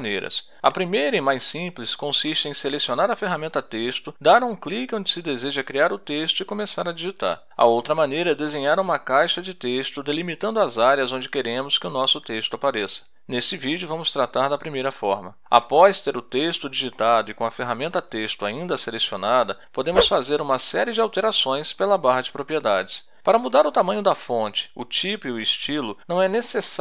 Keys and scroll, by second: 3.0-6.0 typing, 6.8 F1, 12.7-17.2 typing, 20.9 t.